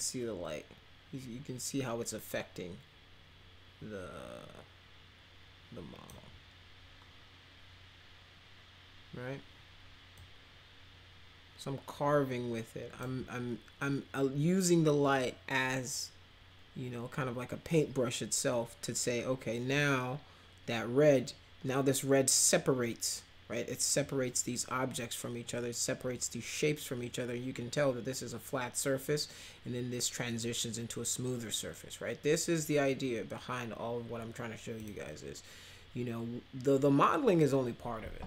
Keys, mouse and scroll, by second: 10.2-13.0 drag, 34.8 click.